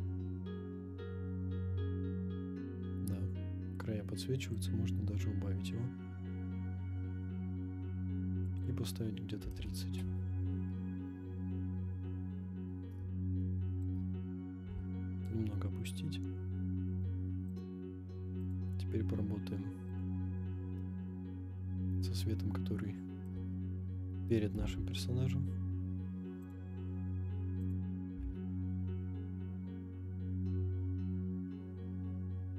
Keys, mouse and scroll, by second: 1.4-1.8 scroll up 4, 4.5-10.1 drag, 11.3-12.4 scroll down 5, 12.4-13.0 scroll down 2, 13.4-13.8 shift+middle drag, 14.0-14.6 scroll up 2, 14.6 g, 14.7 z, 17.6 click, 18.4 click, 19.9 click, 20.8-21.9 middle drag, 23.3 KP_0, 24.5 r, 24.6 z, 26.5 click, 26.8 scroll up 1, 27.6 click, 28.1 r, 28.2 z.